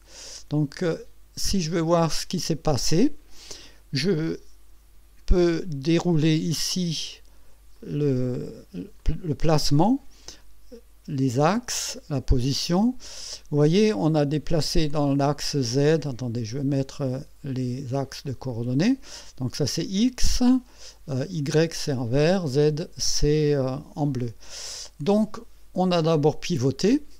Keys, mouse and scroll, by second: 0.8 click, 1.6-2.0 scroll down 2, 7.8 click, 9.0 click, 9.4 click, 16.2 click, 18.1 click, 21.1-21.9 drag, 24.2 KP_1, 26.6 click.